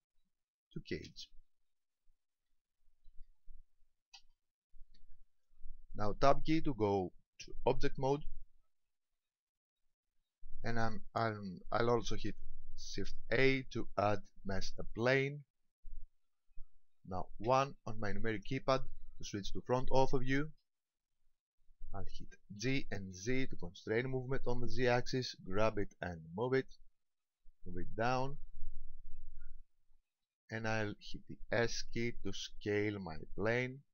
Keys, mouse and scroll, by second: 7.7 Tab, 9.0 Tab, 13.3 shift+a, 17.5 KP_1, 19.8 shift+middle click, 20.8-21.3 scroll up 2, 22.6 g, 27.1 ctrl+click, 27.6 middle click, 29.0-29.6 scroll down 3, 30.0 shift+middle click, 32.5 s.